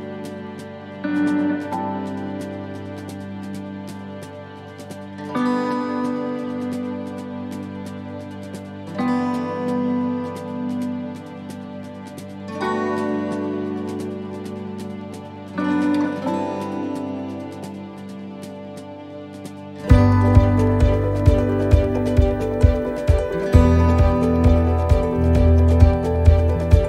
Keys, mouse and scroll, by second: 0.4 shift+middle click, 1.3 middle click, 1.9-2.4 scroll down 2, 2.3 middle click, 3.1 shift+middle click, 3.5-3.8 scroll down 2, 3.8 middle click, 5.4 shift+d, 8.9-9.4 scroll down 1, 9.6 middle click, 9.6-10.6 scroll down 1, 10.6 g, 13.0 g, 19.0 right click, 19.9 x, 21.0 shift+middle click, 21.7 middle click, 24.0 middle click, 25.4 right click, 25.6 middle click.